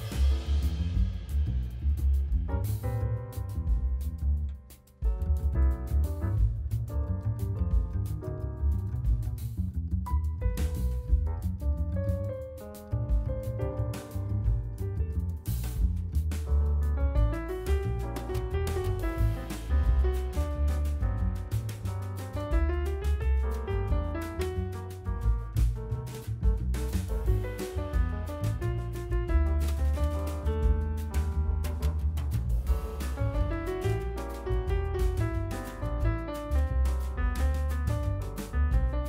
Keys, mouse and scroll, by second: 0.3-0.7 scroll up 2, 0.7 KP_1, 1.8 g, 4.0 shift+z, 4.2 scroll up 4, 4.5 shift+middle click, 5.1-6.0 shift+middle drag, 6.0 g, 7.2-8.1 middle drag, 8.1-8.9 scroll down 1, 8.9 r, 10.3 shift+z, 10.5 KP_7, 11.1-11.6 shift+middle drag, 11.6 r, 12.2 shift+middle click, 12.6-13.3 scroll down 3, 13.4 shift+d, 14.7 KP_1, 15.7 shift+z, 16.0-17.0 middle drag, 17.0 g, 18.4-18.8 scroll down 2, 19.1-19.9 middle drag, 19.9 KP_7, 20.4 scroll down 2, 20.6-21.0 shift+middle drag, 21.0 shift+z, 21.2 scroll up 2, 21.5-22.1 shift+middle drag, 22.1 shift+d, 24.1 r, 25.3 shift+d, 27.2 shift+d, 28.5-29.0 middle drag, 29.0 shift+z, 29.2-30.1 scroll up 5, 30.1-30.5 scroll down 2, 30.5 middle click, 30.6 shift+right click, 31.0 shift+a, 33.0 r, 34.5 g, 35.2 s, 36.0 KP_7, 36.4 scroll down 5, 36.8 scroll up 3, 37.0-37.3 shift+middle drag, 37.3-37.8 scroll up 4, 37.8 shift+middle click, 38.3 s.